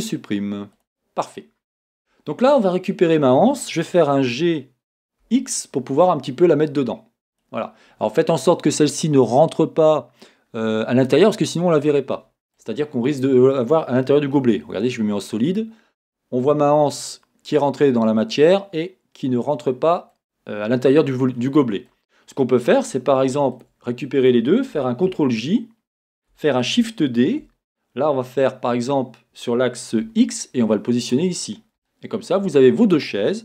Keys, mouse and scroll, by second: 2.0 Tab, 4.3 g, 8.0-11.5 scroll, 12.9-23.6 middle drag, 12.9-14.4 scroll down 1, 14.4 z, 20.2-20.9 scroll, 20.9-21.5 scroll down 2, 22.1-22.9 scroll, 23.6 shift+click, 25.1 ctrl+j, 26.7 shift+d, 31.1 click, 31.4-31.9 scroll, 31.9-33.4 shift+middle drag.